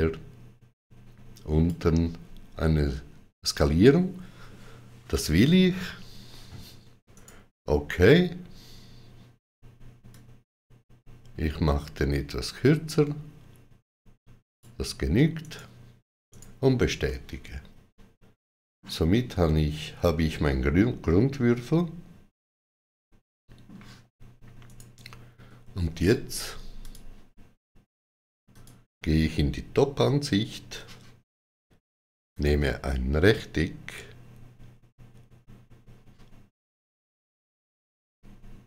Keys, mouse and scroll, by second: 6.9 shift+click, 6.9 middle click, 7.0 right click, 9.9 click, 15.2 right click, 16.1 right click, 16.9 middle click, 19.8 middle click, 19.9-20.3 scroll up 1, 20.3 middle click, 24.5 right click, 25.7 Tab, 26.7 click, 28.4 click, 32.1 click.